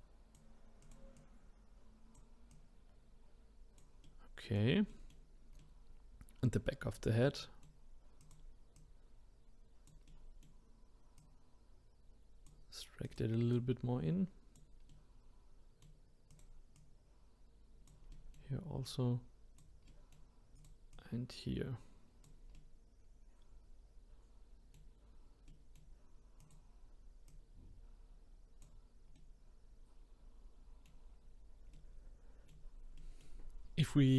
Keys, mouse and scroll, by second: 0.8 click, 1.2 click, 2.5 click, 4.1-6.9 middle drag, 6.9-7.4 scroll up 1, 7.4 middle click, 8.2 click, 8.7 click, 10.1-11.2 middle drag, 11.2 click, 13.1 click, 13.5 click, 14.9-16.3 middle drag, 16.3 click, 16.7 click, 18.1 middle click, 18.8 click, 19.9 middle click, 20.6 click, 20.9 click, 22.6-26.4 middle drag, 26.4 click, 27.3 click, 29.1-31.2 middle drag, 31.2-31.7 scroll down 1, 31.7-33.9 middle drag, 33.9 click.